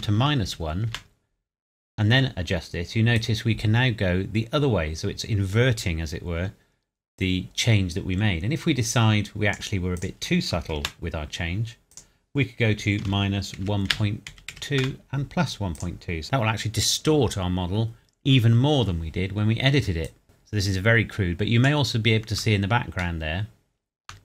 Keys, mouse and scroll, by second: 0.0 KP_Subtract, 0.5 KP_1, 0.9 KP_Enter, 3.1 click, 10.6 KP_0, 10.8 KP_Enter, 11.9 click, 13.0 KP_Subtract, 13.6 KP_1, 14.3 KP_Decimal, 14.5 KP_2, 14.8 KP_Enter, 15.7 click, 16.2 KP_Enter, 20.0 click, 23.2 shift+middle click.